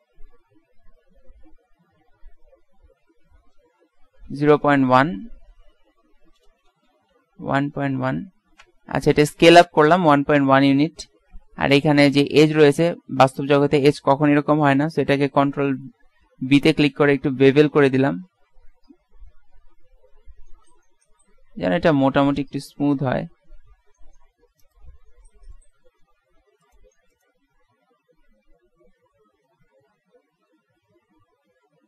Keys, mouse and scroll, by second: 0.3 ctrl+z, 1.1 s, 12.0-14.5 right drag, 16.9 ctrl+b, 25.1-26.4 middle drag, 26.8-27.8 right drag, 27.9 right click, 29.0 ctrl+b.